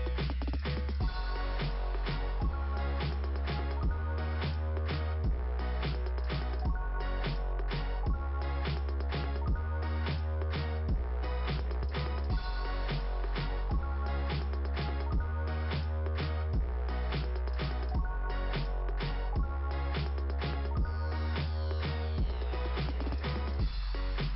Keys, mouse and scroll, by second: 1.8 click, 2.0 click, 3.7 click, 3.8 click, 3.9 click, 4.1 click, 7.9 click, 9.8 click, 10.0 click, 11.5 click, 11.6 click, 13.9 click, 14.0 click, 14.7 scroll up 2, 17.4 click, 18.0 m, 20.1 right click, 21.9 click, 22.3 click, 22.4 click, 22.6 click, 22.7 click, 23.9 right click, 23.9 right click.